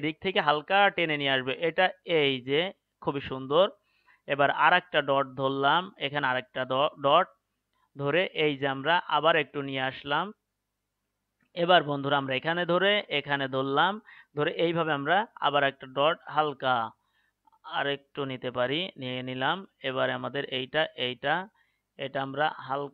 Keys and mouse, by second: 4.5-8.3 right drag, 8.3-10.4 drag, 12.0-15.2 right drag, 19.8-22.6 right drag.